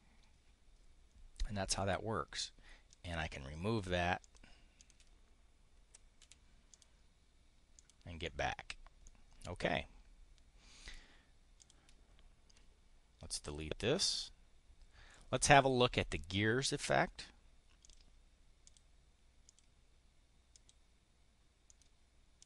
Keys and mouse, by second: 2.8 click, 4.1 click, 4.7 click, 5.8 Insert, 6.1 Delete, 6.7 click, 7.6 click, 8.1 click, 9.0 click, 11.5 click, 13.3 Delete, 17.7 click, 18.5 click, 19.3 click, 20.4 click, 21.5 click, 22.2 click.